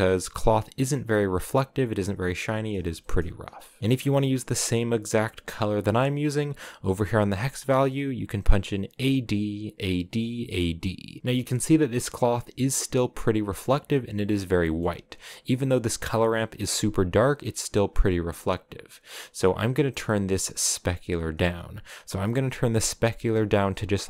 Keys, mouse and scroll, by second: 2.7-3.8 shift+middle drag, 3.8 ctrl+v, 5.0 click, 10.9 scroll down 4, 11.2 middle click, 15.0-19.4 drag, 22.3-24.0 drag.